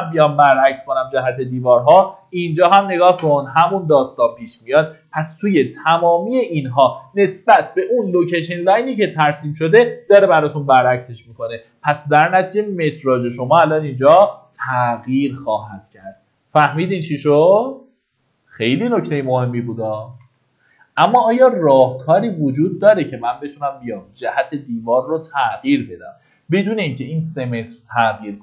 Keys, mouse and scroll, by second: 0.5 click, 1.5 middle click, 2.3 click, 5.3-9.4 scroll down 1, 15.6 middle click, 16.3-18.4 scroll up 1, 20.5 ctrl+z, 21.1 ctrl+z, 21.6 ctrl+z, 22.2 ctrl+z, 22.8 ctrl+z, 23.8-25.2 scroll down 1, 25.2 middle click, 26.3 scroll down 1, 27.0-27.4 scroll up 1, 27.9-28.4 scroll down 1.